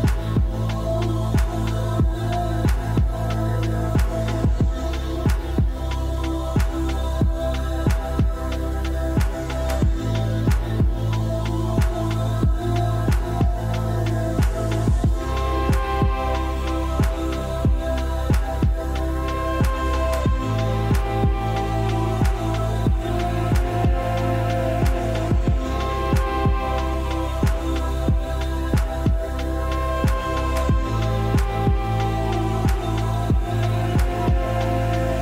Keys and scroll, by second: 28.2 r.